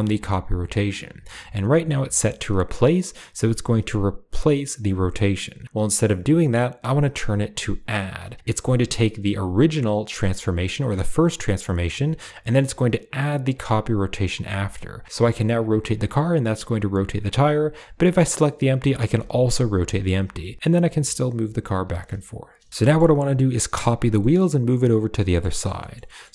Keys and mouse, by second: 1.0-7.8 drag, 9.5 drag, 14.2 click, 15.0 g, 18.6 r, 20.3 click, 20.4 g, 22.7 shift+middle drag, 24.1-25.3 middle drag, 25.4 shift+middle click, 25.7 shift+middle click, 26.0 middle click, 26.0 click.